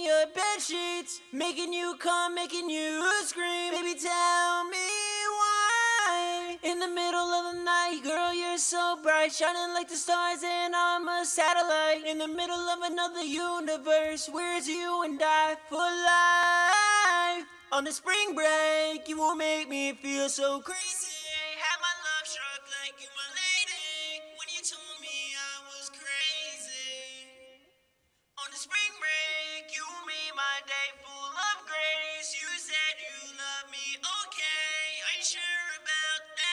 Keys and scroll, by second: 13.8-15.3 typing.